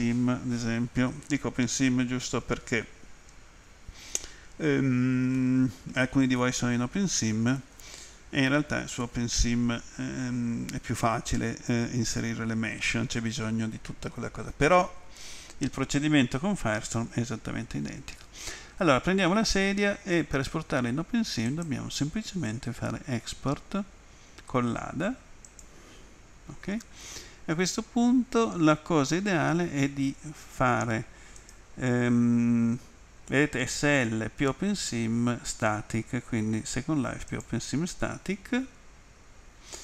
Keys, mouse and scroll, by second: 5.4 middle click, 21.5 click, 25.5 click, 31.4 click, 37.3 click.